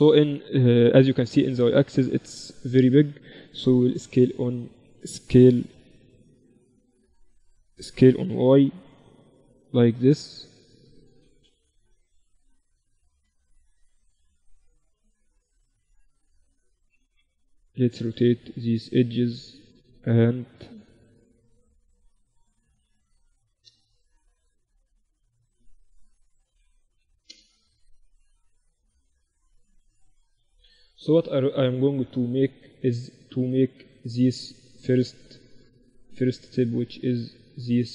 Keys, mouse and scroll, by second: 1.6 a, 1.9 a, 2.5 a, 3.6 s, 5.3 a, 5.7 a, 5.7 w, 6.8 a, 7.1 a, 7.9 s, 11.8 KP_3, 13.6 a, 14.6 b, 16.7 r, 19.6 a, 20.8 b, 22.6 s, 24.3 a, 24.8 b, 26.3 s, 27.9 middle click, 28.1 KP_1, 28.9 z, 28.9 middle click, 29.7 z, 31.5-33.3 middle drag, 34.5-37.9 middle drag.